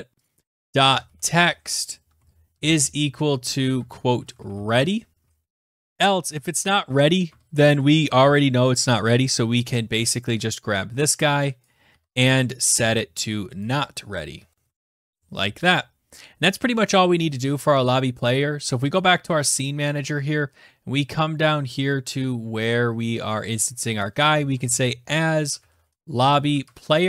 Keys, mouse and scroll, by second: 0.4 click, 0.7-1.7 typing, 5.4-7.0 typing, 5.6 click, 7.4 Tab, 8.2 typing, 8.3 Return, 11.8 click, 11.9 {, 12.1 ctrl+c, 12.6 click, 12.9 ctrl+v, 13.8 click, 14.3-15.3 typing, 19.0 click, 20.1-20.4 scroll down 8, 21.0-22.1 scroll, 22.9-23.6 scroll, 24.1 click, 24.3-27.0 typing.